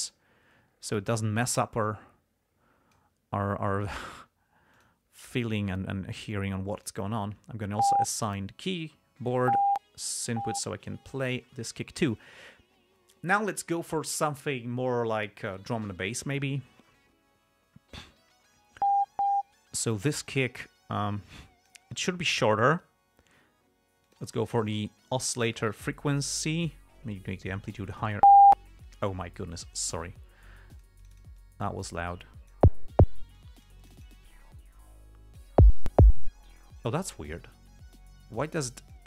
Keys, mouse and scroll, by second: 2.2-3.5 drag, 4.3 click, 5.1 click, 7.1 click, 20.6-22.2 drag, 24.4 click, 26.7 click, 27.5 click, 30.0-33.1 drag, 33.7 click, 37.7-39.0 drag.